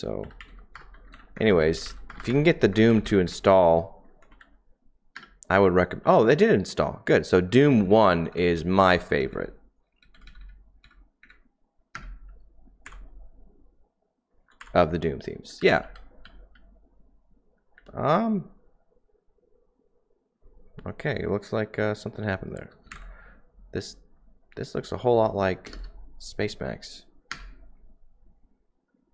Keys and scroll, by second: 0.0-4.3 typing, 5.1 Return, 7.4 Down, 7.4-16.7 typing, 8.0 Down, 10.2 Down, 17.7-18.8 typing, 22.6-23.3 typing, 27.3 Return, 27.3 typing.